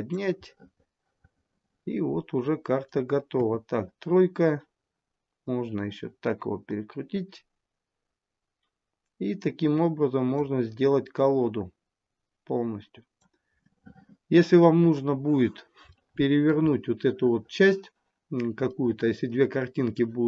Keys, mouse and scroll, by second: 0.7 middle click, 3.6 KP_3, 4.7-5.7 scroll down 2, 5.7 click, 5.7-6.1 scroll down 2, 11.4 click, 13.9 middle click, 15.0-15.4 scroll up 6, 15.4-16.1 scroll down 1, 16.1 scroll down 1, 16.2 shift+middle click, 16.9 middle click, 18.9 middle click.